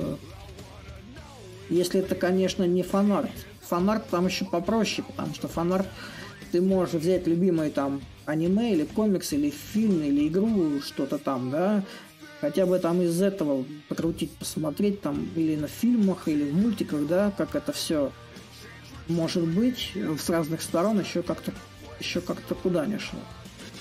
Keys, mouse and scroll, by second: 2.6-4.4 drag, 5.2-10.3 drag, 12.3-15.9 drag, 16.0-23.8 shift+drag.